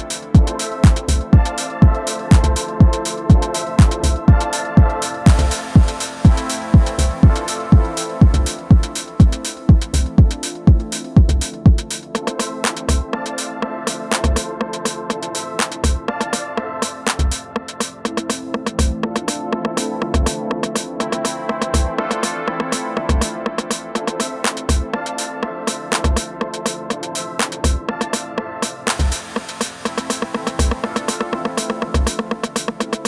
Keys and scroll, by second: 31.8 space.